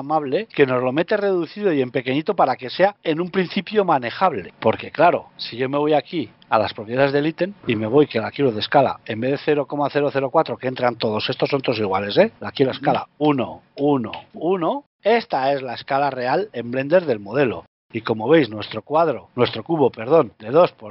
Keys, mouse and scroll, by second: 7.1 click, 18.3 click, 19.6-20.0 scroll down 12, 20.0-20.6 scroll up 7, 20.6 middle click.